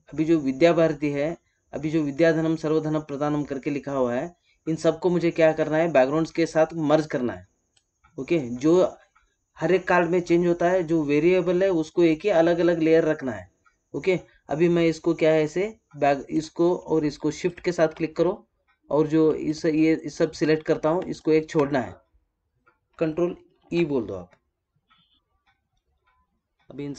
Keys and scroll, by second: 23.5 ctrl+e.